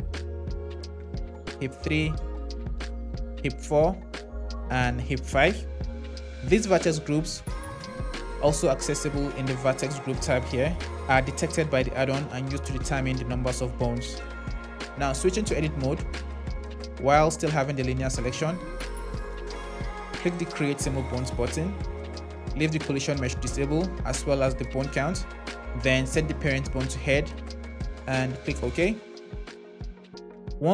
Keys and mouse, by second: 0.7-2.0 drag, 2.7 click, 4.1 click, 6.1 click, 11.2 click, 14.4 Tab, 15.3 Tab, 17.5 shift+z, 18.3 z, 20.3-28.8 drag.